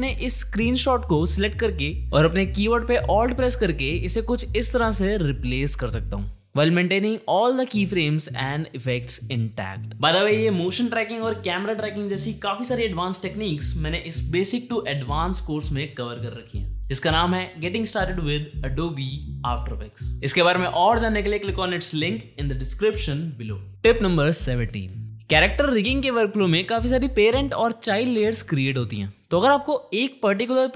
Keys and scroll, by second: 7.3 u, 13.1 ctrl+d, 13.4-14.9 typing.